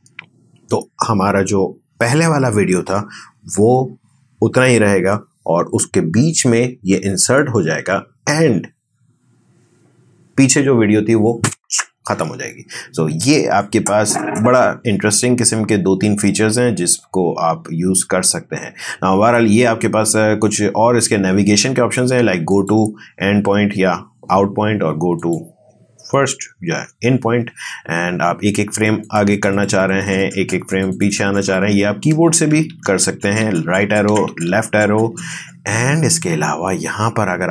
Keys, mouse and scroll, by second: 13.8-15.3 drag.